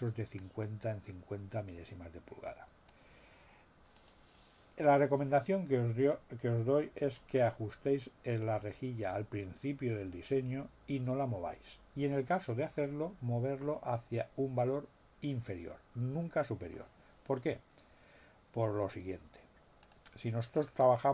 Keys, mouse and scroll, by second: 3.9 click, 19.8 click.